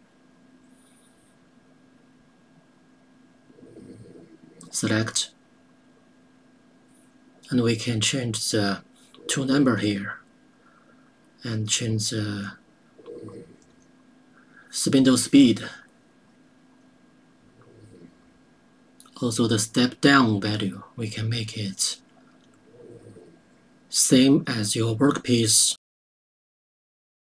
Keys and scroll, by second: 11.3 2, 16.5 KP_1, 16.7 KP_8.